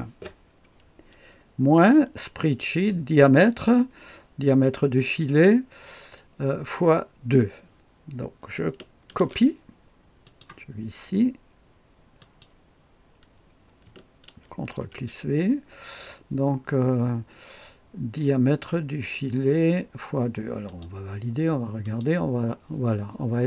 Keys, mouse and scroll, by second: 9.1 ctrl+c, 10.2 click, 10.7 click, 12.1 click, 14.4 ctrl+v, 20.6 click, 21.8 click.